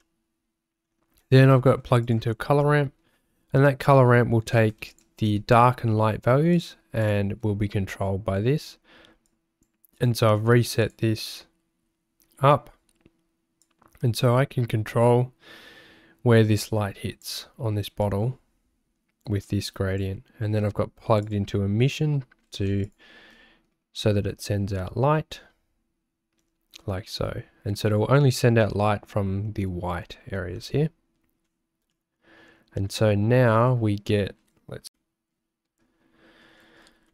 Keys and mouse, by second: 0.1 shift+middle click, 2.0 ctrl+shift+click, 4.9 ctrl+shift+click, 6.5 click, 7.0 ctrl+shift+click, 9.3 click, 10.0 click, 13.7-17.3 drag, 18.0-20.0 drag, 21.2 click, 22.9 ctrl+shift+click, 31.9-32.9 middle drag.